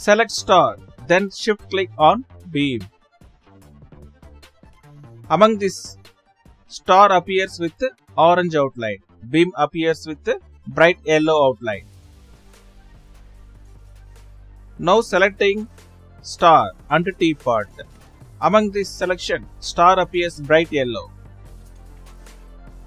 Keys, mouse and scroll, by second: 0.4 right drag, 1.9 right drag, 1.9 shift+click, 4.3 click, 7.7 shift+click, 14.1 click, 15.3 shift+Left, 15.3 right click, 15.6 right click, 17.5-18.1 right drag.